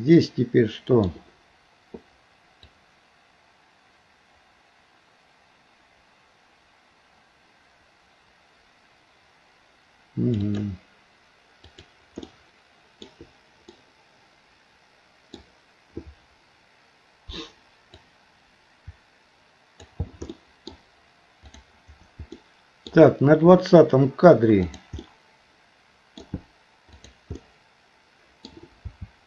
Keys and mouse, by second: 2.7-10.4 drag, 11.7 click, 12.2 middle click, 13.7-15.4 middle drag, 18.0-20.0 drag, 20.4 middle click, 21.5 click, 22.3 middle click, 24.7 click, 25.0-26.2 middle drag, 27.0 click, 27.4-28.5 middle drag, 28.8 r.